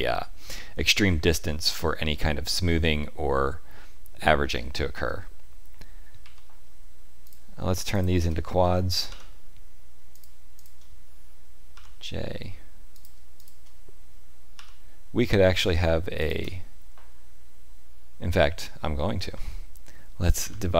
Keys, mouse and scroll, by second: 6.2 1, 7.2 click, 7.9 shift+click, 9.0 j, 10.1 click, 10.5 shift+click, 11.7 j, 12.9 click, 13.3 shift+click, 14.5 j, 15.5 click, 16.1 shift+click, 20.3 ctrl+r.